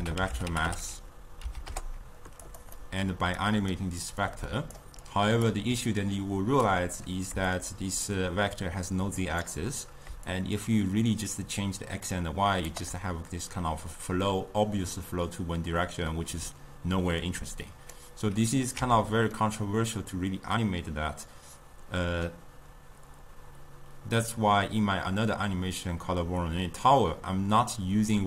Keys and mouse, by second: 0.0 ctrl+a, 2.9-3.5 middle drag, 3.5 click, 4.3-5.3 drag, 6.1-13.4 drag, 17.4 click, 19.0 x, 19.4-22.6 middle drag.